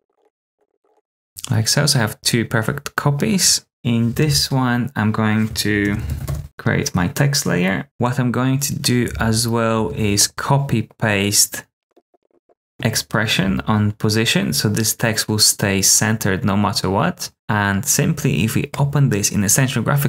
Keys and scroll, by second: 0.0-0.8 typing, 0.2 Return, 0.5 super+d, 0.9 Return, 4.2 super+t, 5.6-6.7 typing, 7.8 a, 9.1 super+c, 9.9 super+v, 11.9 p, 12.0 p, 12.2 super+c, 12.4 super+v, 13.3 v.